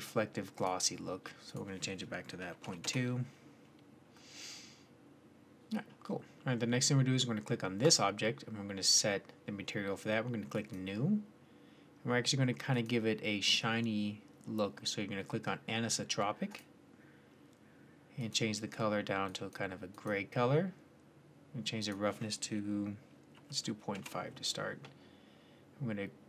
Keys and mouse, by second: 10.4 middle click, 14.4-18.0 middle drag.